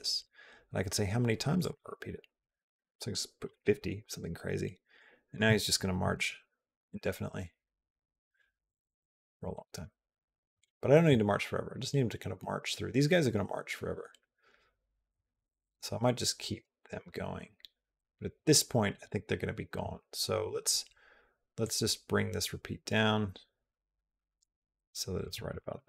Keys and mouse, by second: 1.6-3.2 drag, 4.8 click, 6.0 space, 18.4 space, 21.6-25.1 drag, 25.3 click.